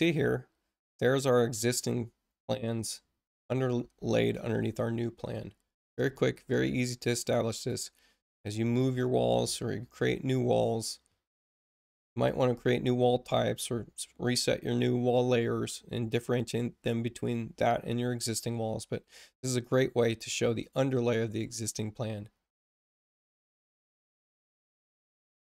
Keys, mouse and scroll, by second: 3.3 space, 7.5 click, 8.5 click.